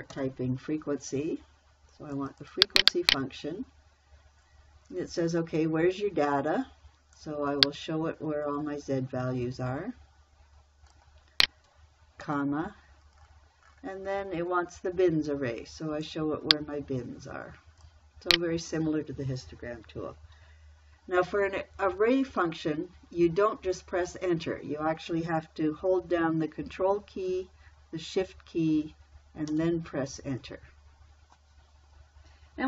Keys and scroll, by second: 0.0-0.6 typing, 12.7 ,, 29.9 ctrl+shift+Return.